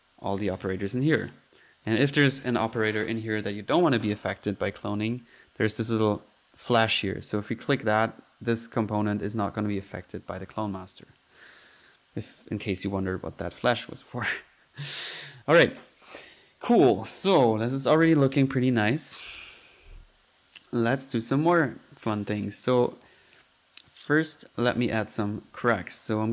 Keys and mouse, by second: 0.0-0.5 typing, 4.1-4.9 typing, 4.2 click, 4.8 click, 6.1 click, 7.3 middle click, 7.6-8.3 typing, 9.8 click, 14.9-15.7 typing, 15.0 click, 18.7 click, 18.7 right click, 19.9 click, 19.9-22.3 typing, 20.7 right click, 21.2 right click, 21.5 drag, 21.8 click, 22.5 click, 25.5 middle click.